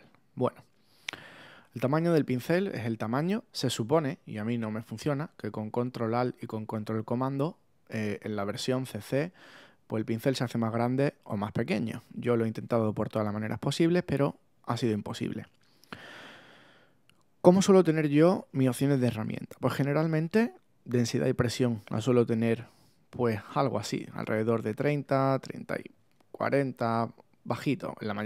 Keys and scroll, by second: 26.6 Down.